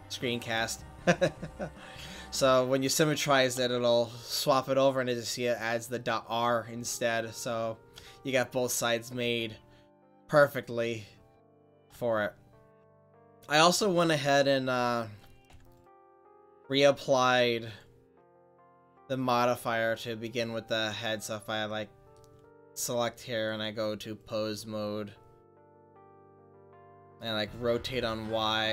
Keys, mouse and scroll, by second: 3.3 middle click, 3.9-7.1 right drag, 7.1 middle click, 8.2 middle click, 15.3 click, 15.6 Tab, 17.6-19.3 drag, 19.3 middle click, 20.1-21.6 drag, 20.1-24.0 right drag, 22.1 click, 24.3-25.8 drag, 25.8-27.8 right drag, 27.8 r.